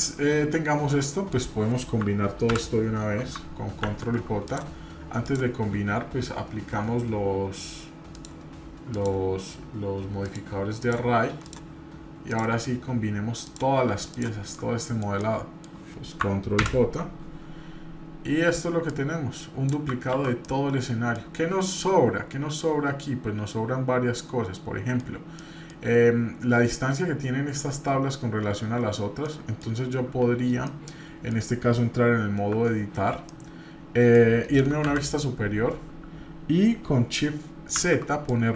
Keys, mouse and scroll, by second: 0.0-1.3 middle drag, 2.5 ctrl+j, 3.8 ctrl+z, 4.5 click, 5.2 click, 8.1-9.0 drag, 10.2-10.9 drag, 11.4 click, 12.3 click, 13.4-14.3 shift+drag, 14.5 shift+middle click, 15.2 middle click, 16.6 ctrl+j, 18.9-19.7 drag, 20.1 ctrl+z, 20.4-21.3 middle drag, 21.3-21.7 scroll up 1, 21.7-25.0 middle drag, 25.4 middle click, 25.9-27.4 scroll up 2, 29.0 scroll down 1, 29.2 middle click, 30.7 middle click, 32.5 Tab, 33.3 middle click, 34.8 KP_7, 37.8 shift+z, 38.3 click.